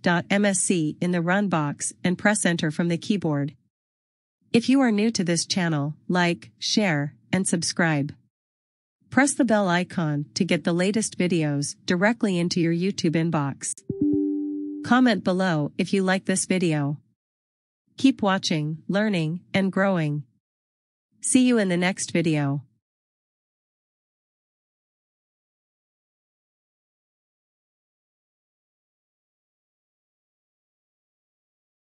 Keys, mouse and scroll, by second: 1.9 right click, 6.5-7.4 scroll down 1, 7.7 click, 9.5 right click, 12.4 click.